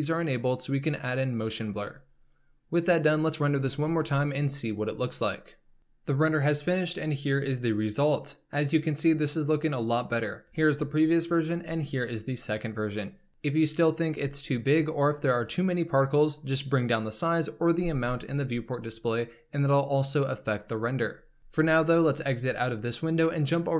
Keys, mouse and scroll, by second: 1.8 click, 22.6 F11.